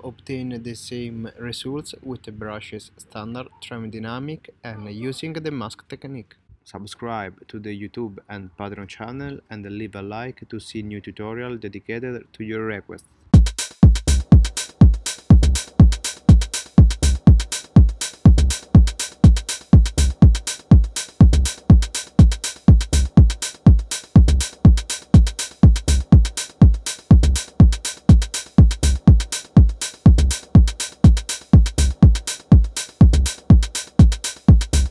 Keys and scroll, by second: 4.9 super+z, 6.2 space, 18.1 m, 18.6 m, 22.0 super+z, 23.3 super+z, 25.7 c.